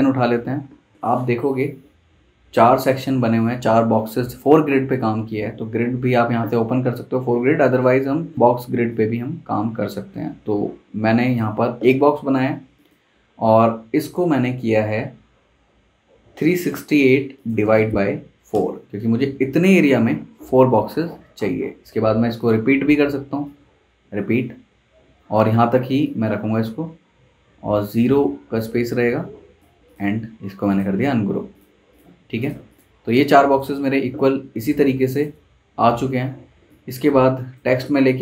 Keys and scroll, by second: 18.3-19.3 typing, 19.8 Return.